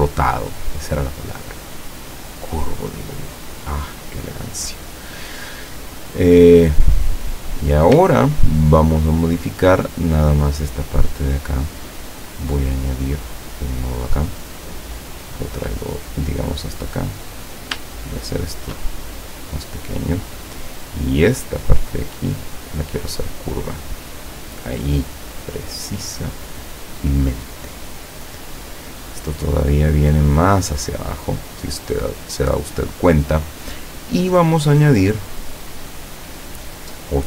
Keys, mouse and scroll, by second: 6.4 click, 7.2 click, 8.6-9.2 ctrl+scroll up 4, 13.4 click, 14.1-17.7 drag, 18.4 shift+click, 19.0-20.4 shift+drag, 21.2 click, 22.0-23.3 drag, 24.2 click, 29.8-32.9 drag, 35.3 click.